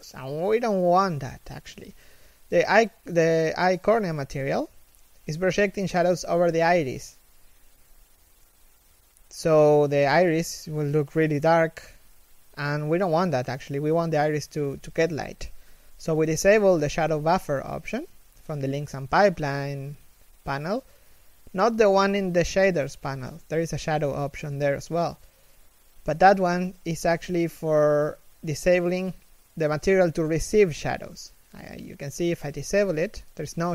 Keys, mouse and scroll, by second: 7.0 KP_3, 7.2 z, 7.3 scroll up 1, 19.8-24.5 typing, 19.9 scroll down 1, 23.7 middle click, 26.9 g, 27.9 1, 30.1 right click.